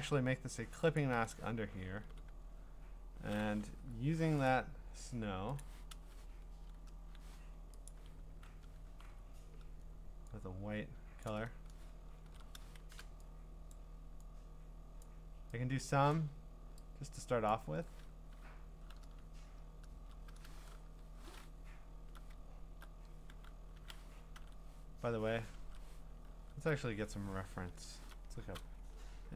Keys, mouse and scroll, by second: 1.0 alt+click, 2.0 g, 3.8 u, 4.5 right click, 5.6 click, 7.9 click, 8.4-9.5 typing, 11.2 click, 12.3 ctrl+z, 12.8 typing, 13.7 click, 15.0 click, 20.8 Up, 22.4 scroll, 24.4 ctrl+Tab, 25.6 ctrl+Tab, 26.4 alt+Tab, 27.7 ctrl+t.